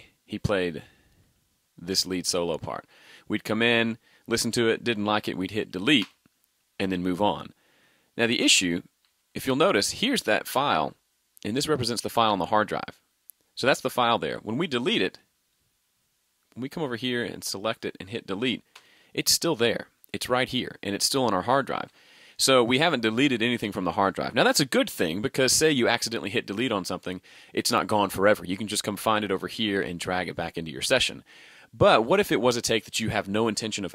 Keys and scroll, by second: 9.1 super+z, 21.8 super+z.